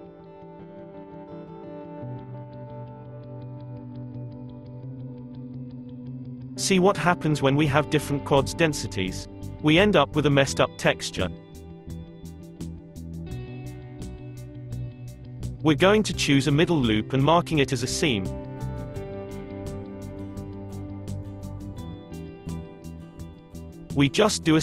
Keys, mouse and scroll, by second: 3.4 Tab, 5.1 click, 6.3-9.7 middle drag, 9.7 click, 10.3-14.9 middle drag, 14.9 click, 15.3-16.0 middle drag, 16.0 Tab, 16.2-19.4 middle drag, 19.4 right click, 20.0 middle click, 20.6 a, 21.4 a, 24.0 u.